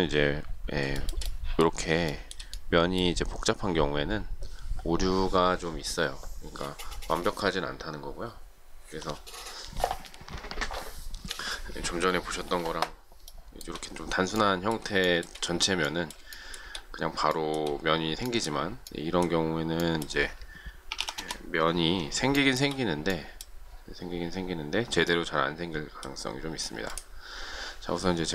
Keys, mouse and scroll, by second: 0.9 shift+middle click, 2.0 shift+middle click, 13.3 shift+middle click, 15.0 shift+middle click, 16.3 shift+middle click, 17.3 shift+middle click, 20.6-21.4 typing, 22.3 shift+middle click.